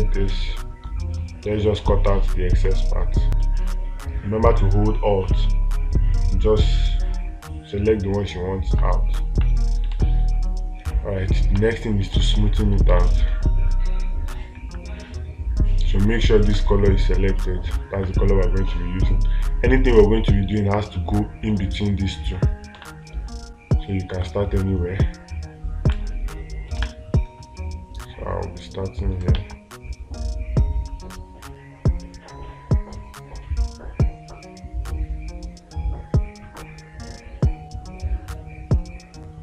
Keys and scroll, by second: 10.4 space, 12.6 space, 23.2 space, 27.2 space, 29.8 ctrl+z.